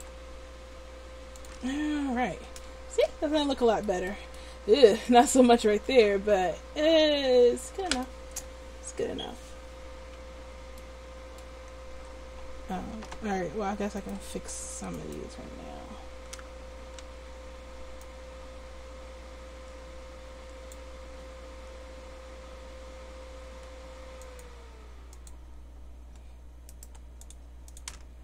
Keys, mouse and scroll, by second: 0.4 g, 2.2 Tab, 11.9 Tab, 14.0 click, 17.0 c, 26.8 right click, 27.2-28.2 drag.